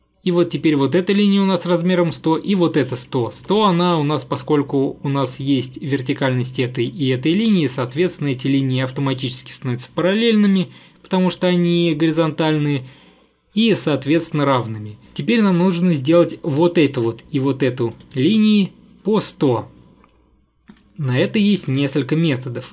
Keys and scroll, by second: 3.4 Escape.